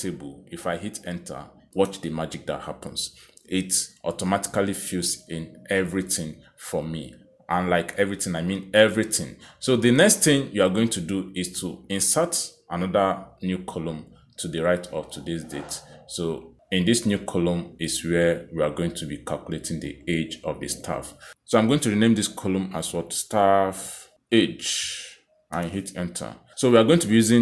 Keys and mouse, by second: 3.2 Return, 6.7 click, 6.9 click, 12.6 click, 14.1 click, 15.2 BackSpace, 16.2 click, 17.2 click, 18.2 click, 18.7 right click, 21.7 click, 22.9 click, 23.9 click, 25.2 s, 26.5-27.4 typing.